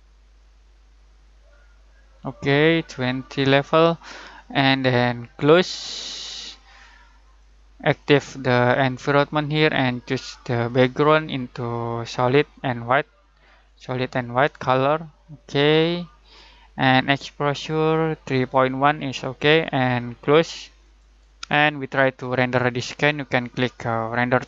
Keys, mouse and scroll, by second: 10.6 click, 20.8 click.